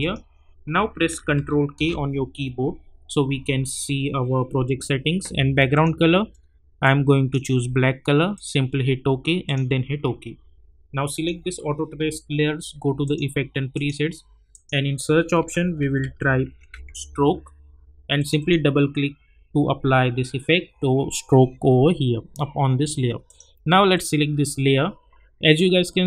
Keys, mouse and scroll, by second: 1.7 ctrl+k, 5.7-8.3 drag, 15.4-17.2 typing, 18.2 click, 23.2 click.